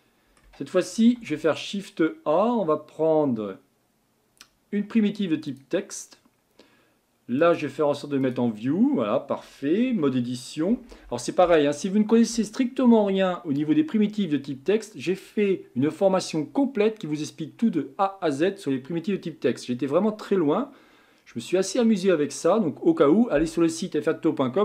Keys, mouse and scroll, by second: 1.1 shift+a, 7.4-8.8 drag, 8.8-9.8 scroll up 4, 9.8 Tab, 10.7 BackSpace, 10.8 BackSpace, 11.4 BackSpace.